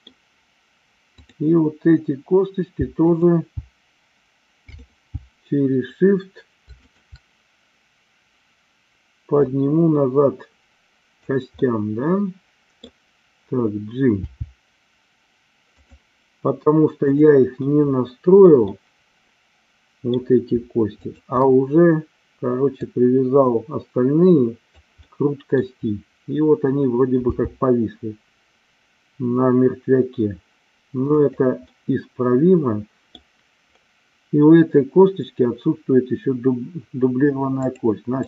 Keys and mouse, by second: 1.1 click, 2.8 g, 3.0 click, 3.3 g, 6.6-7.8 shift+drag, 9.4-11.3 drag, 11.7-12.9 middle drag, 14.1 g, 15.8 click, 18.1 middle click, 18.8-20.2 middle drag, 20.9 shift+click, 22.8-24.8 drag, 25.0 middle click, 27.3 g, 31.0 click, 31.7-33.2 middle drag, 37.5 click.